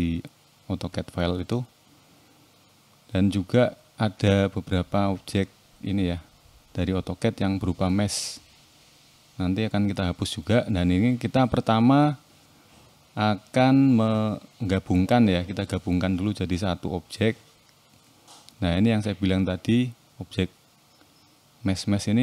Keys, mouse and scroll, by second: 0.8 click, 1.3-1.7 scroll down 1, 1.7 middle click, 2.9 n, 3.5 shift+middle click, 4.1-4.7 scroll up 4, 5.3 KP_7, 6.3 shift+middle click, 8.4 click, 9.9-11.5 scroll up 1, 12.5 a, 14.2 ctrl+j, 17.4 click, 20.0 x, 21.7 click.